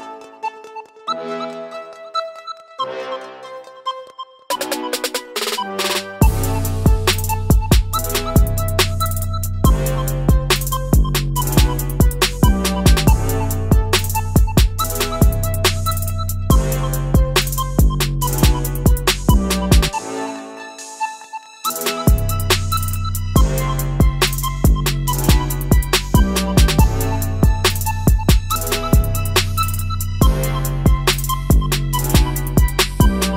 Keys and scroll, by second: 8.8 ctrl+c, 12.2 ctrl+shift+v.